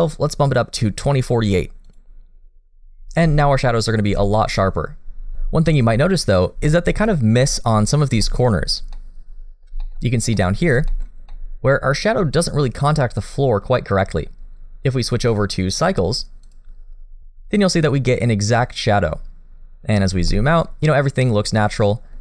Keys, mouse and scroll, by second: 4.2 shift+middle click, 6.0 middle click, 6.6 shift+middle click, 7.2-7.8 scroll up 2, 7.7 middle click, 8.2 shift+middle click, 8.5-8.9 scroll up 1, 8.9 middle click, 9.8 shift+middle click, 10.0 scroll up 1, 10.3 middle click, 10.9 shift+middle click, 11.1 scroll up 1, 11.3 middle click, 14.0-15.0 scroll down 1, 15.0-15.7 scroll up 2, 15.7 click, 19.8-20.2 scroll down 2, 20.3 shift+middle click, 20.8 middle click, 22.1 middle click.